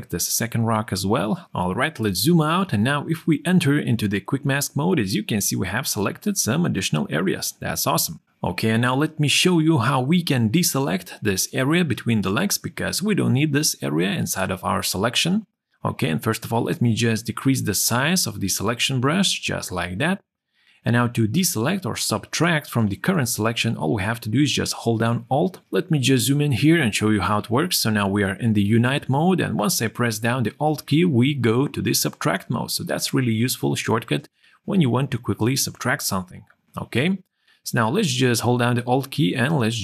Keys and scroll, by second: 1.8 ctrl+0, 3.5 q, 7.3 q, 13.1 w, 16.2 [.